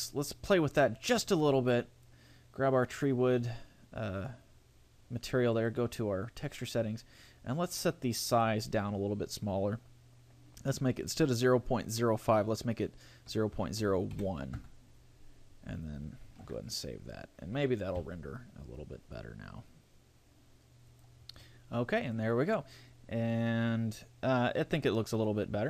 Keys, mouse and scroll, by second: 0.0 scroll up 5, 0.8 right click, 5.6 click, 6.8-7.2 scroll down 4, 7.6 scroll down 1, 8.4 click, 16.4 ctrl+s.